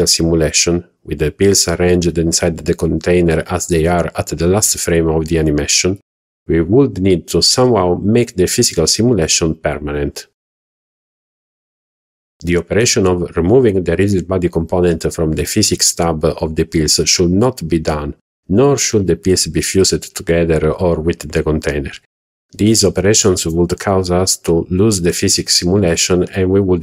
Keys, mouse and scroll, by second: 0.1-0.4 scroll up 2, 0.6 click, 1.0 shift+middle drag, 1.3 middle click, 1.6 scroll up 1, 1.9 shift+middle click, 2.2 scroll up 1, 2.5 scroll down 1, 2.7 shift+middle click, 4.1 click, 4.6 click, 9.9 click, 13.0 click, 13.7 click.